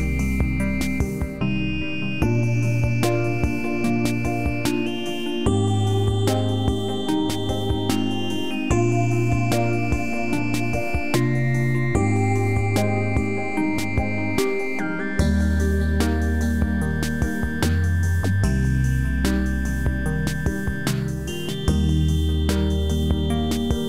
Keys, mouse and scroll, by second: 2.8-3.3 scroll down 1, 4.0 click, 11.2 click.